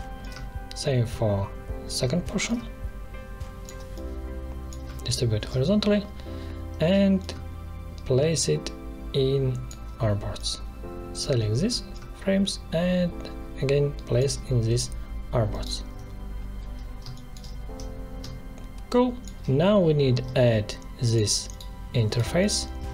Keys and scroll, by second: 5.2 ctrl+shift+h, 17.0 space.